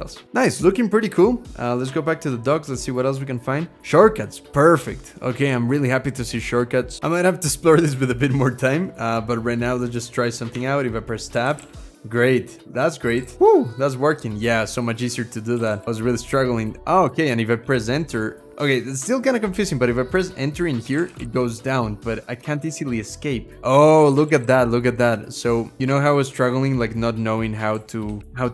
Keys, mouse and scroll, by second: 10.3 Tab, 10.9-13.7 typing, 12.4 Tab, 14.9 Tab, 15.1-18.0 typing, 18.3 Return, 20.0 Return, 20.4-21.5 typing, 21.6 Escape, 22.8 Escape, 23.5-24.7 typing, 24.9 Tab, 25.6 Return, 26.4 BackSpace, 27.5-28.5 typing.